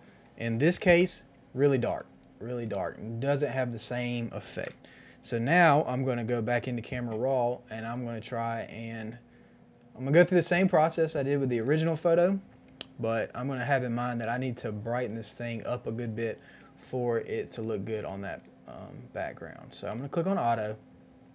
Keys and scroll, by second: 0.7 KP_1, 0.7 KP_0, 0.9 KP_0, 0.9 Return, 2.0 space, 4.5 KP_0, 4.5 Return.